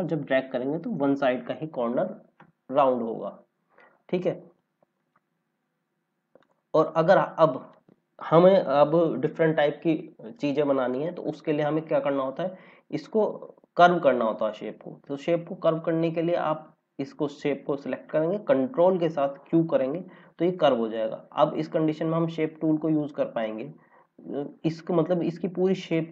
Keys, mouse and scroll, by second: 5.2 ctrl+z, 6.3 click, 10.8 click, 14.3 click, 19.3 ctrl+q, 21.8 click.